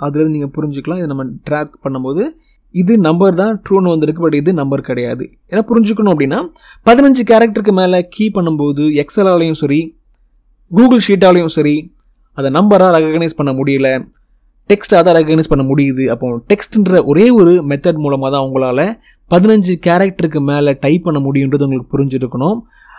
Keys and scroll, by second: 6.1 Delete.